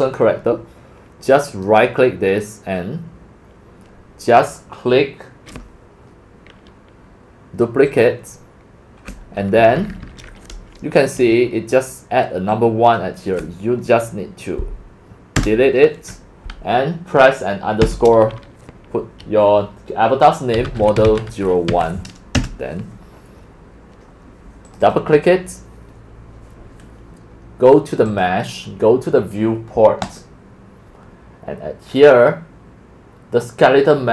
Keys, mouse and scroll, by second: 1.7 right click, 6.3-6.8 right drag, 7.9 click, 9.6 Right, 9.8 Right, 10.0 Right, 10.0 Right, 10.2 Right, 12.5 click, 15.4 BackSpace, 17.8 typing, 20.3-22.2 typing, 22.3 Return, 24.7 click, 24.8 click, 28.1 click, 30.0 click, 31.9 scroll.